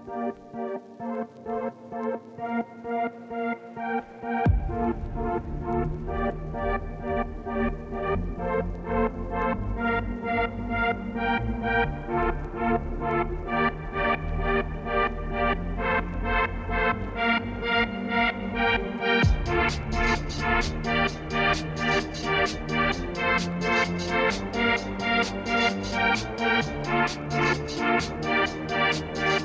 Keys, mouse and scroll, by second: 0.3 Tab, 0.5 ctrl+1, 1.0 middle click, 1.3 Tab, 1.6 Left, 2.1 ctrl+b, 2.5 Tab, 3.0 right click, 3.2 scroll down 1, 4.5-6.1 middle drag, 6.1 shift+d, 6.9 Tab, 7.1 a, 8.4 Left, 8.5 shift+middle click, 8.6 scroll up 2, 8.8 e, 9.8 o, 10.3 Tab, 10.8-11.3 scroll down 1, 11.3 Tab, 11.7 o, 11.9 scroll down 1, 12.0 Tab, 13.5 shift+click, 13.6 shift+click, 14.0 alt+d, 15.8 shift+right click, 16.2 KP_7, 16.5 shift+middle click, 16.8 scroll up 1, 17.2-20.1 shift+middle drag, 20.5 Tab, 20.7 s, 21.3 z, 22.4 Left, 22.7 e, 23.1 ctrl+z, 23.5 g, 25.4 ctrl+r, 26.7 g, 27.8 Left, 28.3 r.